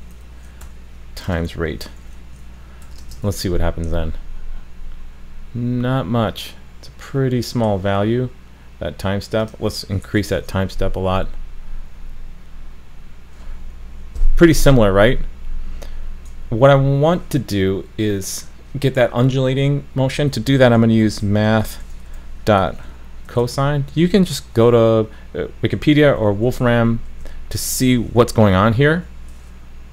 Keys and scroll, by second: 3.3 super+s, 10.4 super+s.